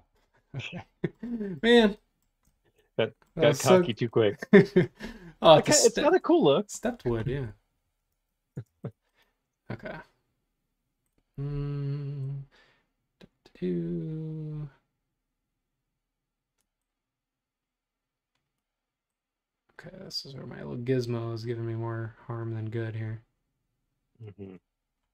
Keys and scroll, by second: 0.1 super+z, 6.9 Escape, 7.3 Escape, 8.6 space.